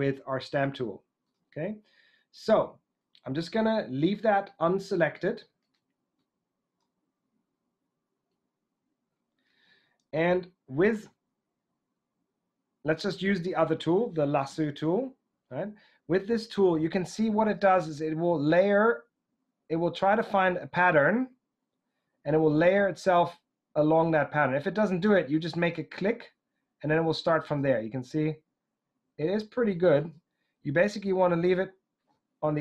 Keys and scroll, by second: 14.5 |, 17.9 |.